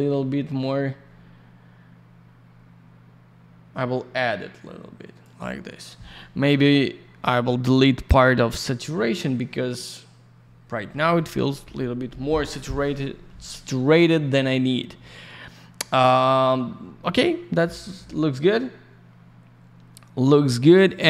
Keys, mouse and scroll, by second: 8.4 click, 8.6 click, 20.9 middle click.